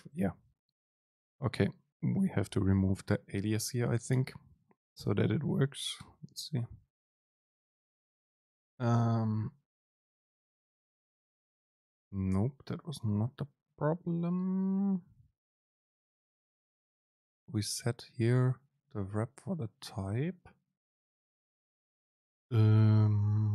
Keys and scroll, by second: 4.2 BackSpace, 6.1 ctrl+shift+super+F9, 11.3 super+space.